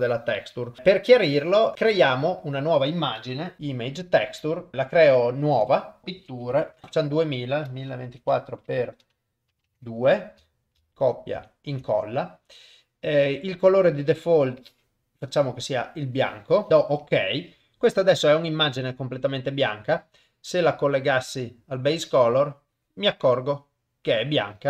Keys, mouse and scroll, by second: 1.4 click, 1.7 shift+a, 5.6-17.1 drag, 6.7 t, 18.0 click, 20.1-21.4 drag, 23.1 middle click, 23.9 click.